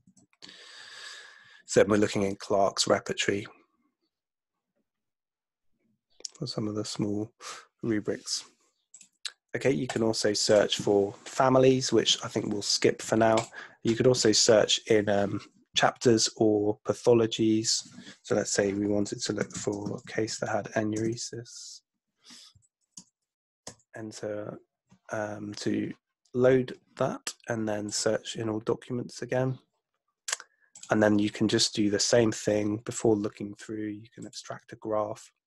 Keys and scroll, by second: 0.1 super+F2, 19.2-21.1 typing, 22.6 Down, 22.9 Return, 23.7 Return.